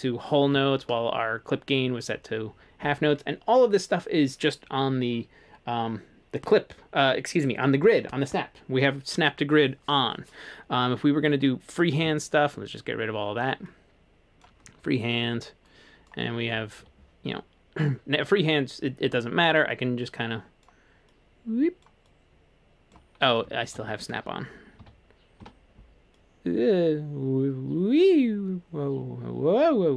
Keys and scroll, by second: 12.1 super+z, 16.9 ↺, 23.5 super+z, 23.8 super+z, 25.4 n.